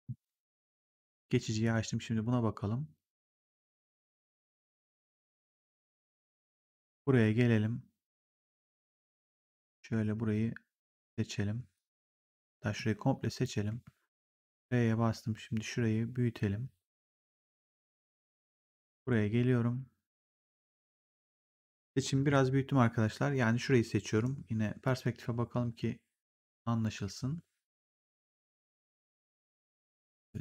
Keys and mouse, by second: 0.7 click, 2.0 r, 3.8 click, 8.4 right click, 9.0 click, 12.6 click, 13.6 r, 14.5 click, 17.0 w, 17.5 click, 24.0 right click, 24.7 click, 30.1 click.